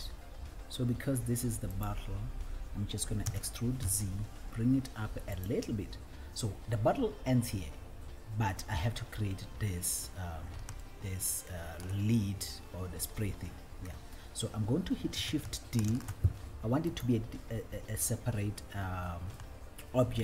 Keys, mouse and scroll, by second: 2.1 click, 2.1 s, 3.5 e, 4.2 z, 5.8 click, 9.8-10.7 scroll down 2, 10.7 scroll down 1, 11.2 shift+middle click, 12.5-13.6 scroll up 1, 16.1 scroll up 1, 17.4 right click, 17.4 shift+d, 18.8 scroll up 1, 19.7 shift+middle click.